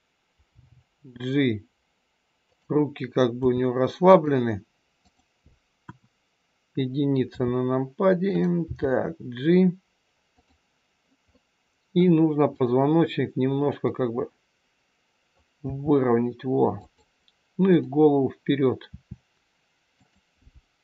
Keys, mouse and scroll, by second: 0.4 g, 3.4 r, 5.0 click, 5.9 KP_1, 7.4 r, 8.6 g, 11.2 middle click, 12.6 click, 13.8 middle click, 15.5 r, 17.6 click, 18.7 r.